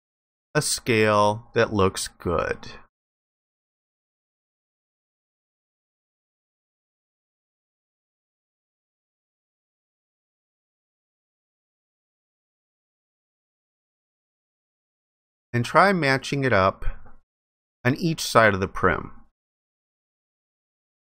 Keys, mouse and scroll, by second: 15.2 alt+click.